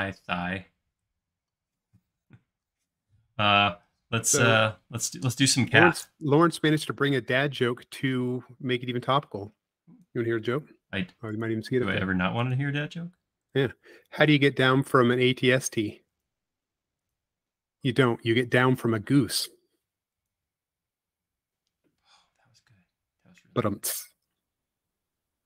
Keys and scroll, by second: 6.2 c, 10.6 i, 24.7 l.